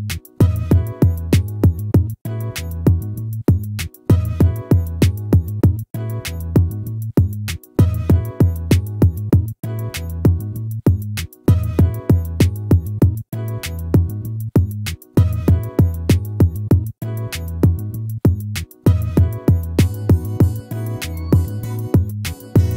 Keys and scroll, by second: 3.7 ctrl+z.